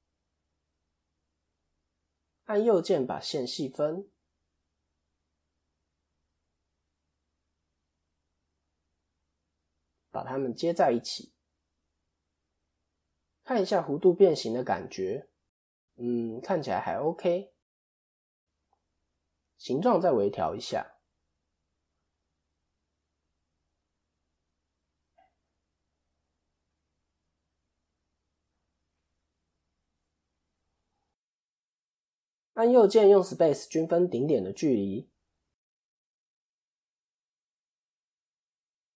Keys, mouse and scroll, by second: 0.6 click, 1.5 shift+click, 2.2 right click, 4.2 click, 7.8 x, 8.7 click, 9.3-9.6 shift+click, 10.2 f, 11.0 shift+middle click, 15.1 ctrl+KP_3, 17.4 KP_7, 18.2-19.1 scroll down 1, 19.1-19.6 scroll down 1, 19.6 scroll up 1, 19.7 shift+middle click, 21.5 click, 22.5 shift+middle click, 23.3-32.2 click, 32.2 a, 32.6 right click, 35.8 click.